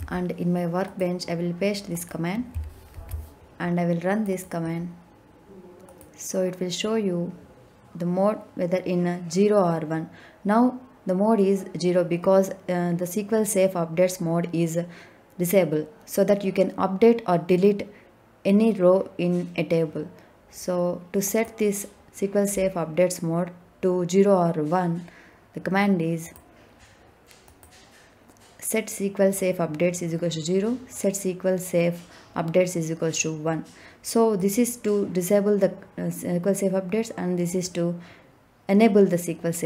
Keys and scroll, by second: 2.9 ctrl+v.